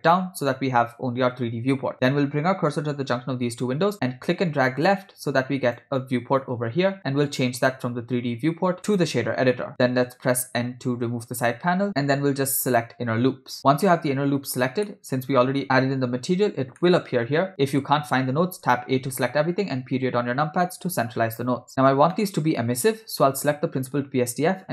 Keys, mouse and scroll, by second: 0.0 right click, 4.3-5.8 drag, 7.3-9.1 drag, 11.1 n, 12.7 click, 14.9 middle click, 16.8-17.9 ctrl+middle drag, 19.1 a, 22.2 middle click, 22.6 scroll up 2, 23.4 click.